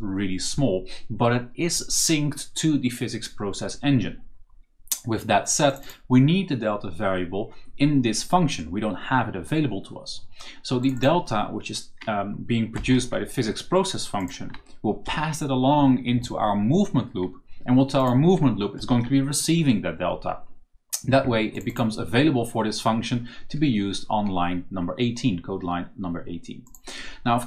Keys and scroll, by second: 12.6 ctrl+c, 14.1 c, 14.9 ctrl+v, 17.9 v, 18.7 ctrl+v.